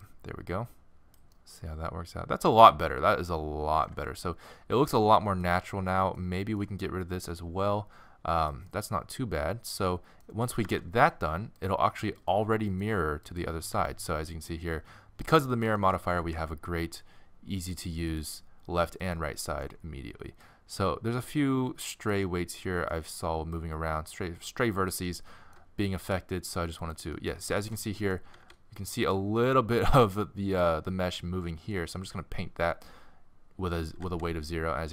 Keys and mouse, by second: 2.9 middle click, 3.2 middle click, 4.1-6.6 middle drag, 8.5-10.7 middle drag, 10.7 alt+r, 12.2-14.2 drag, 13.8 r, 14.2-15.3 right drag, 16.3 r, 19.1-19.4 right drag, 19.4-20.4 middle drag, 20.9-21.4 middle drag, 22.3-25.8 middle drag, 25.9 r, 28.3 r, 28.7 middle click, 28.9-29.9 middle drag, 34.0 r, 34.3 middle drag.